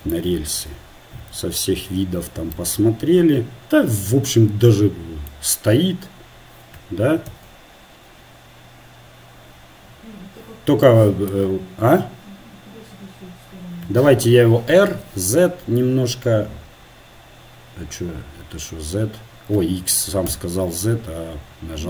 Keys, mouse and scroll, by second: 1.3 KP_4, 1.4 KP_1, 7.4 KP_0, 8.5-10.5 middle drag, 14.9 r.